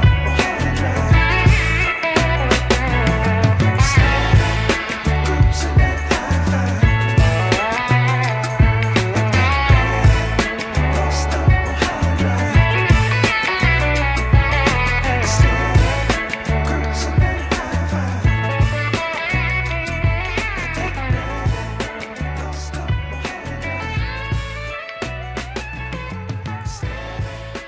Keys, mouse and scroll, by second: 0.1 alt+click, 1.1 ctrl+b, 4.0 Tab, 4.7 shift+middle click, 5.3-6.3 scroll up 2, 6.5 click, 6.7 Tab, 7.2 middle click, 9.4 ctrl+b, 15.3 Tab, 15.8-16.2 scroll down 2, 16.2-17.8 middle drag, 18.0-18.4 scroll down 4, 18.4 shift+middle click, 20.2 middle click, 20.9 click, 21.2 Tab, 21.6 scroll up 2, 22.2 shift+middle click, 23.4 alt+click, 24.5 ctrl+b.